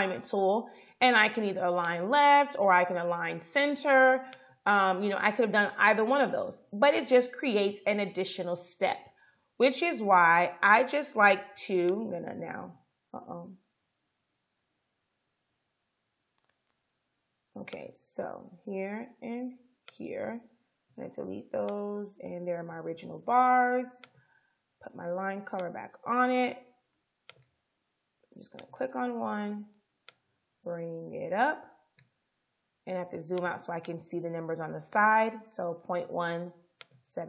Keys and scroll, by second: 11.2 Delete, 13.7 ctrl+z, 16.2 ctrl+z, 20.9 Delete.